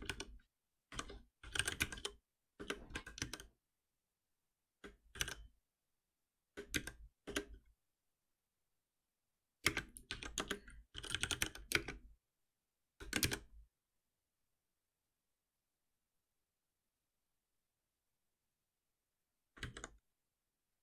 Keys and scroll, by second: 2.5 Return, 19.6 ctrl+s.